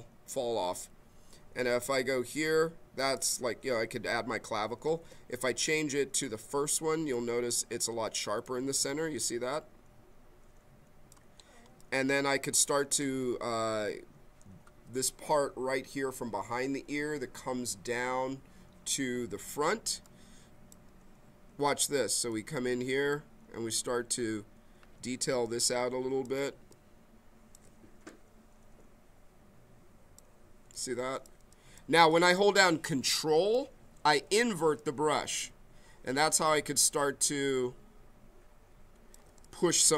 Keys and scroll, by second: 4.9 ctrl+z, 25.3 b.